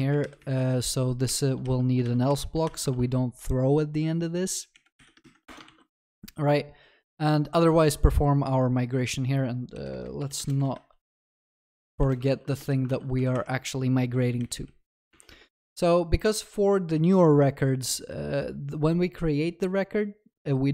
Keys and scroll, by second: 0.2 Return, 2.0 ctrl+y, 2.9 ctrl+s, 12.3 ctrl+s, 15.1 Tab.